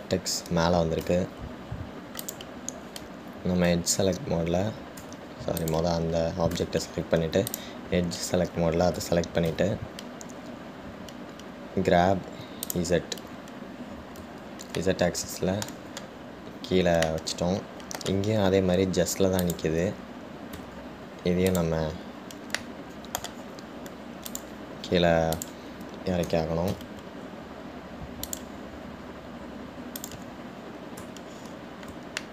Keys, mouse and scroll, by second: 2.8-3.4 scroll up 2, 3.4 click, 6.2 Tab, 6.8 click, 8.7 click, 15.2-16.0 scroll down 1, 16.0-20.6 shift+middle drag, 20.6 click, 21.7 `, 23.8-25.5 middle drag, 25.5-26.6 drag, 27.5 g, 31.2 click, 32.1 Tab.